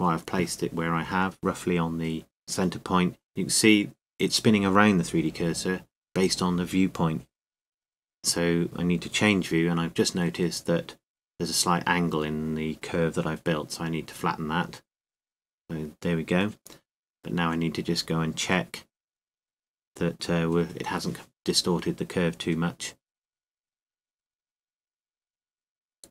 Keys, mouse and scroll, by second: 2.8-6.5 drag, 6.5 ctrl+z, 9.6 KP_3, 11.7-13.5 middle drag, 13.5 a, 14.0 a, 15.4 s, 22.6 KP_0, 24.8 KP_3.